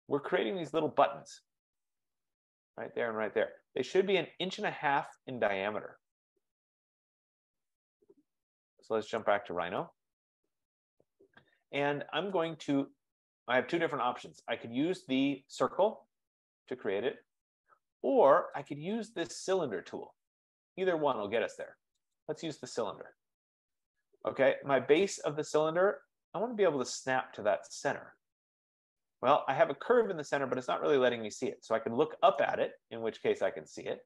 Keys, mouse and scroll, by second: 2.6-4.3 middle drag, 5.4-8.9 drag, 9.4 click, 11.1 click, 13.9 F15, 17.0 F15, 18.8-20.1 drag, 22.3 click, 25.9-27.1 scroll, 27.1 scroll, 29.2-31.2 middle drag, 32.4-34.0 right drag.